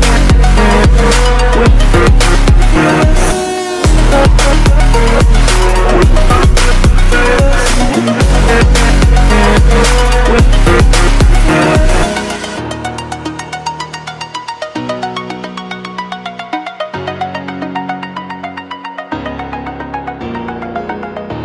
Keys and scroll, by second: 11.4 Return, 14.1 ctrl+space, 14.3 ctrl+space, 15.1 ctrl+0, 15.5 f, 16.3 ctrl+0, 16.9 ctrl+space, 17.9 space.